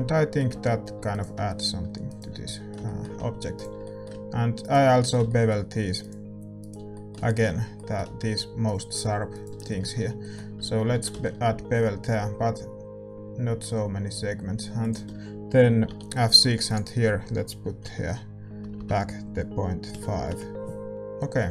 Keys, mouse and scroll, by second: 0.5 Tab, 0.5 middle click, 0.9 a, 1.0-10.9 right drag, 2.4-12.0 middle drag, 10.9 ctrl+b, 20.2 BackSpace.